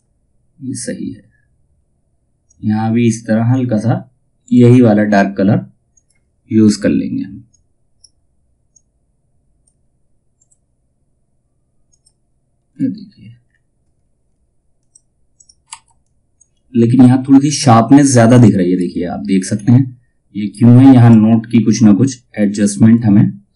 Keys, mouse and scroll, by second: 1.7 typing, 2.0-9.9 drag, 12.3 space, 14.3 click, 15.2 F2, 15.5-17.8 drag, 18.2 space, 19.0-20.5 scroll up 1, 20.5 click, 22.2-23.3 drag.